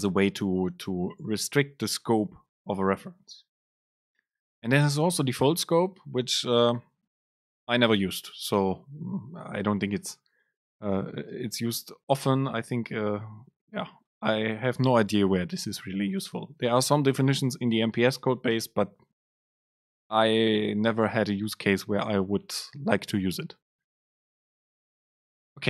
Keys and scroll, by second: 11.4 super+space.